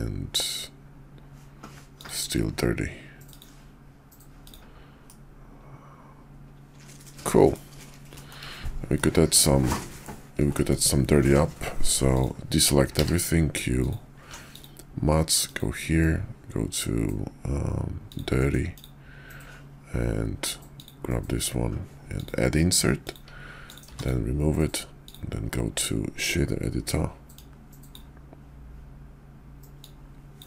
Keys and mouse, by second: 4.3 click, 5.1-7.1 middle drag, 7.1-7.5 drag, 7.5 middle click, 8.1 shift+middle drag, 9.0-10.0 middle drag, 10.5 shift+middle drag, 12.1 click, 12.9 q, 23.6 click, 23.9 x, 25.1 click, 27.2 click, 29.6 click.